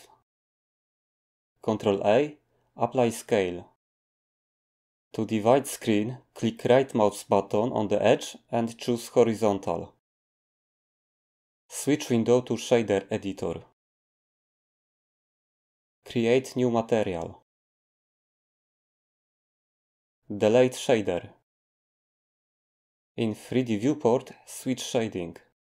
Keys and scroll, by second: 1.5 ctrl+a, 21.8 Delete.